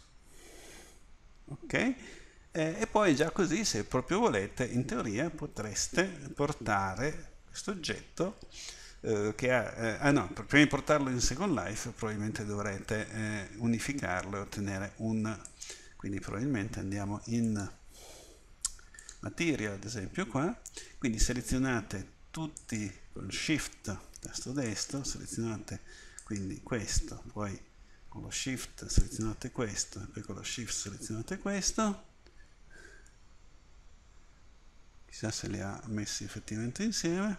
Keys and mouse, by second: 0.0 Return, 0.0-1.3 middle drag, 10.9 click, 11.8 middle click, 15.6-17.5 right drag, 17.5-19.4 drag.